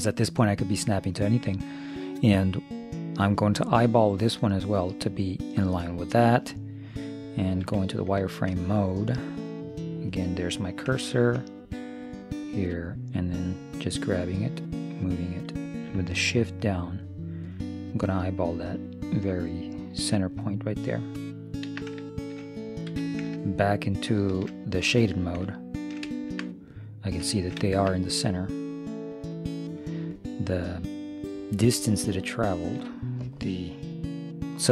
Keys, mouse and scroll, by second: 7.7 z, 8.2 middle click, 10.0-12.0 drag, 12.1-14.0 drag, 14.2-16.0 drag, 22.2 middle click, 22.9 z, 25.5-29.7 middle drag, 30.6-32.4 middle drag, 32.4-34.1 drag.